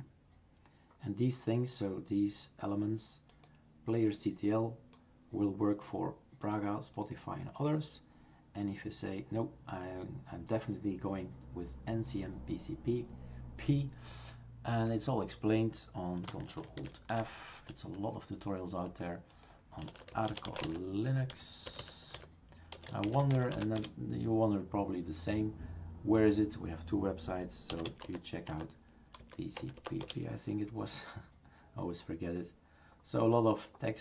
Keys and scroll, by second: 16.8 ctrl+alt+f, 19.5-20.4 typing, 21.7 typing, 27.4-28.3 typing.